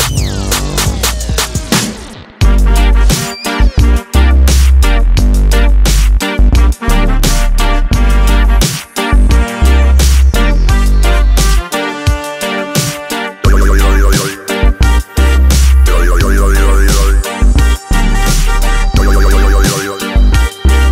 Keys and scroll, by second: 10.3 Escape, 17.4 Escape, 19.6 Escape.